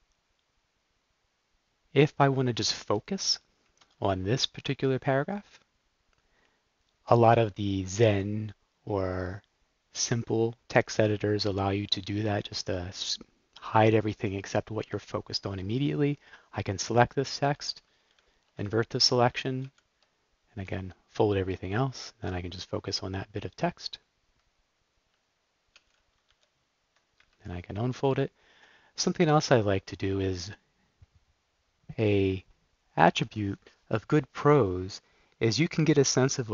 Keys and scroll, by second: 2.5 Down, 3.2 Down, 3.5 Right, 4.0 shift+Down, 5.4 shift+Up, 18.2 shift+super+i, 19.6 super+k, 20.6 f, 25.7 super+k, 26.3 u, 27.1 Up.